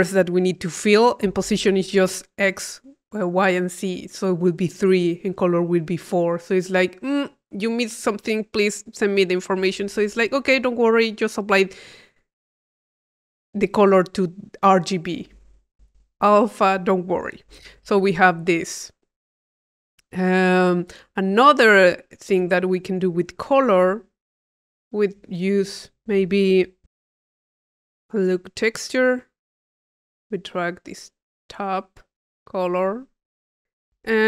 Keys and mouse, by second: 20.2 click, 21.8 click, 22.3-23.8 drag, 24.5-25.6 drag, 25.8 click, 28.1 click, 29.0 click, 30.2-31.7 drag.